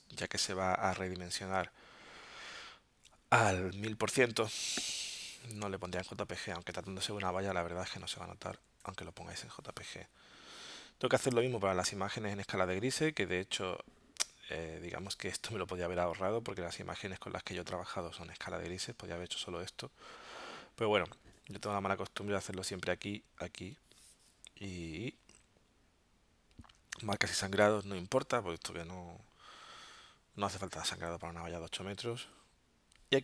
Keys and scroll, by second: 7.9 Tab, 8.5 3, 9.3 Tab.